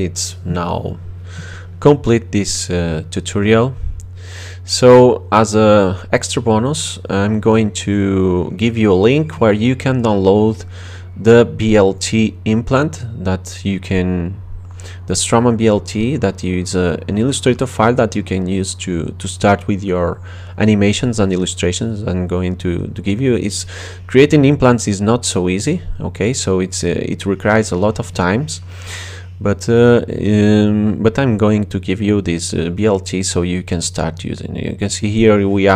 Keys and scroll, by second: 2.6-4.1 typing, 28.1 BackSpace, 28.6 x, 28.8 Return.